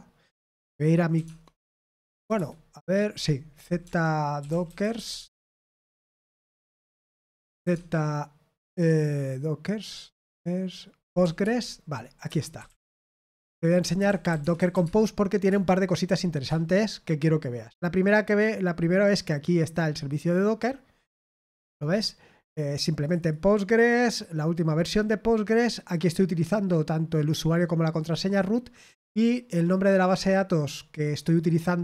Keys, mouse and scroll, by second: 1.1-2.3 typing, 3.5-8.0 typing, 10.7-16.1 typing, 12.2 Return, 16.7-20.1 scroll up 2, 20.1-21.7 drag, 21.8 click, 22.9 click, 23.1 click, 27.9 click, 28.2 click, 30.8 click.